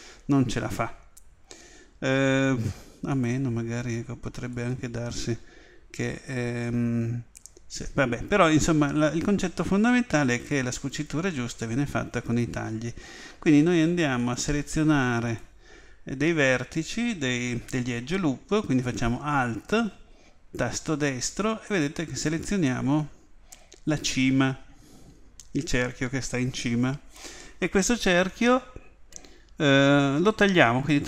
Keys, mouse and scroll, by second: 3.1 click, 4.5-6.4 right drag, 10.5-12.9 middle drag, 14.2-17.2 drag, 20.8-31.0 right drag.